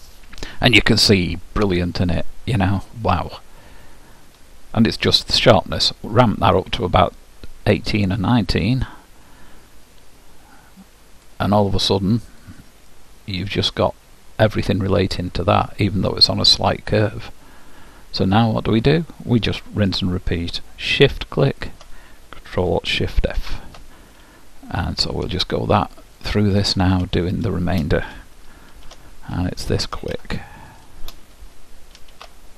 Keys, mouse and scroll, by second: 6.3-8.1 drag, 12.3-14.8 middle drag, 21.7-23.5 drag, 24.6-27.5 ctrl+alt+shift+middle drag, 27.5-29.2 drag, 27.9 middle click, 30.9-32.5 ctrl+alt+shift+drag.